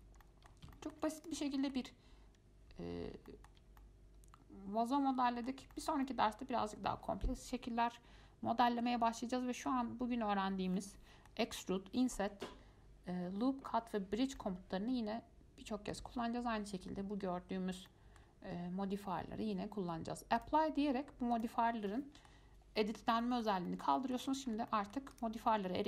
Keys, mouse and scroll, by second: 0.4 middle click, 1.4 click, 1.8-3.1 shift+middle drag, 3.1-3.5 scroll up 2, 3.5 shift+middle click, 3.8 scroll up 1, 4.0-9.1 middle drag, 9.1 scroll down 2, 9.4-10.9 middle drag, 10.9 scroll up 1, 11.0-14.0 middle drag, 14.6-17.6 middle drag, 18.1-20.6 middle drag, 20.6 click, 21.5 click, 22.1-24.4 middle drag, 24.4 Tab, 24.7 scroll up 4, 24.9 middle click, 25.3 click, 25.7-25.8 middle drag.